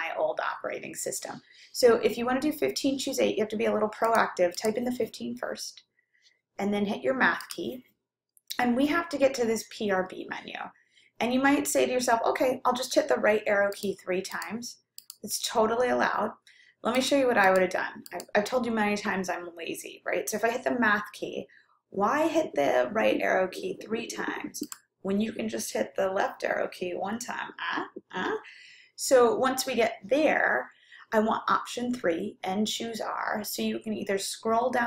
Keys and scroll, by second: 4.4 1, 5.2 5, 13.8 Right, 14.4 Right, 16.4 Right, 17.0 Left, 17.6 Left, 24.7 Left.